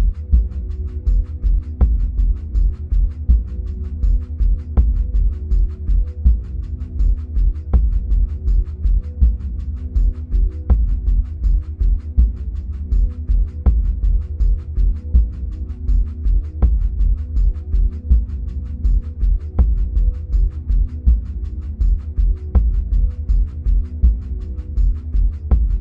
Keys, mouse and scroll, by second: 6.5-9.0 middle drag, 7.6-9.0 scroll down 2, 9.0-14.1 drag, 13.4-14.1 scroll up 2, 14.1-17.4 middle drag, 17.4-21.5 drag.